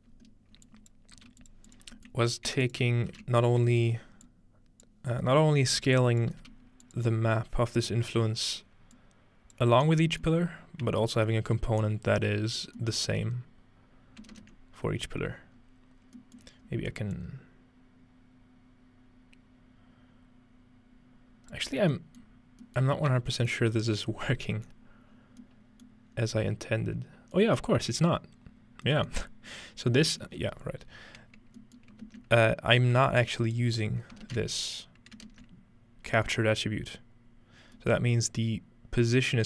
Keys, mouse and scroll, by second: 0.1-1.7 scroll up 2, 0.7-1.0 drag, 1.2 g, 1.7 click, 2.7 click, 3.1 ctrl+h, 4.3 click, 5.0-5.6 scroll down 1, 5.2-6.8 typing, 5.6 scroll up 2, 6.0 click, 6.9 click, 6.9 scroll up 1, 9.0-10.1 drag, 10.5 scroll down 2, 11.1 scroll up 2, 11.6 scroll down 2, 13.5-14.4 middle drag, 14.9-16.0 scroll up 1, 16.0 scroll down 1, 16.4-18.0 middle drag, 16.4 scroll up 1, 17.2-22.6 drag, 21.7-23.3 scroll down 2, 22.6-23.3 middle drag, 23.5 middle click, 23.7-25.3 middle drag, 25.1-26.1 scroll down 2, 25.9-27.4 middle drag, 26.1-28.6 scroll up 2, 27.7-30.1 middle drag, 29.3-29.9 scroll up 2, 29.9-30.4 scroll down 2, 30.2-31.6 middle drag, 31.8 middle click, 32.6-33.6 scroll up 2, 33.4-34.4 ctrl+right drag, 36.3-37.8 middle drag, 37.6-38.2 scroll down 2, 38.2-39.1 scroll up 2, 39.1 click.